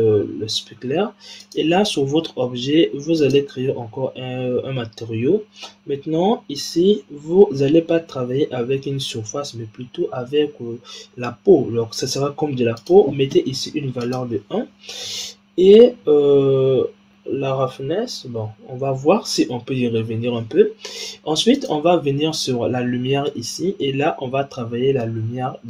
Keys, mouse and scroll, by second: 3.1-5.4 drag, 5.4-7.3 scroll down 8, 7.4-10.4 scroll up 3, 12.7-14.0 drag, 16.0-18.0 scroll down 4, 21.9 click, 23.2-25.2 middle drag, 25.2-25.6 scroll down 1.